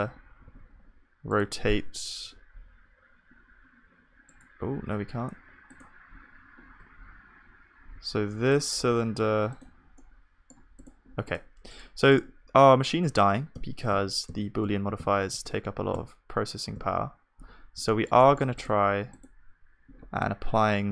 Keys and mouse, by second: 0.6 r, 1.7 r, 5.1-6.5 right drag, 6.0-7.8 drag, 10.0-13.2 drag, 10.0-13.2 middle drag, 13.2-17.9 ctrl+z.